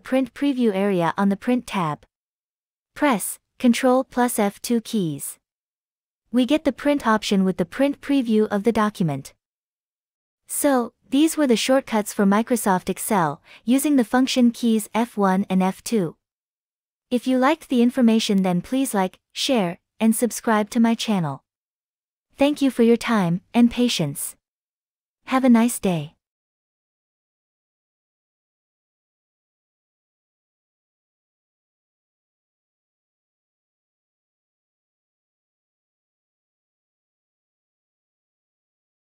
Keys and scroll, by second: 2.7 ctrl+F2, 5.6 ctrl+F2.